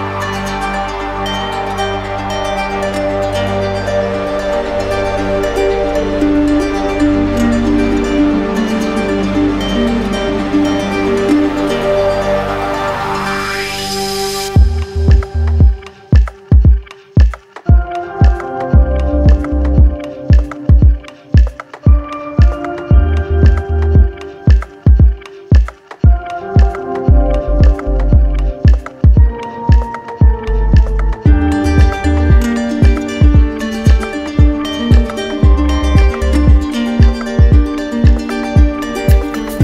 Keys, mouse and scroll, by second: 1.6 click, 2.2 alt+click, 2.7 alt+click, 2.9 shift+click, 4.1 click, 4.9 alt+click, 7.7-8.9 drag, 9.7 click, 10.5 click, 11.4 alt+click, 12.0 alt+click, 14.1 w, 17.5 click, 18.4 click, 18.8 alt+click, 19.4 alt+click, 19.6 alt+click, 22.2 click, 22.6 click, 24.1 click, 24.8 click, 25.0 click, 25.2 click, 26.3 click, 27.2 click, 28.6 click, 30.1 alt+click, 30.5 q, 32.1 click, 35.8 click, 36.4 alt+click, 37.5 click, 39.1-39.6 right drag.